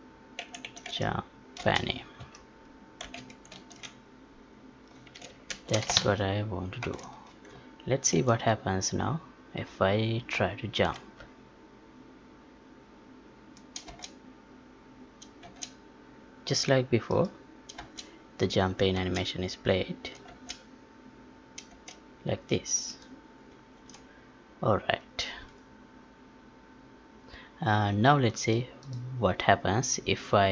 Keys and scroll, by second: 3.5 ctrl+s, 5.5 ctrl+shift+s, 5.9 alt+z, 6.2 alt+Tab, 8.1 ctrl+p, 13.8 space, 15.4 space, 17.7 space, 21.7 space, 23.7 ctrl+p.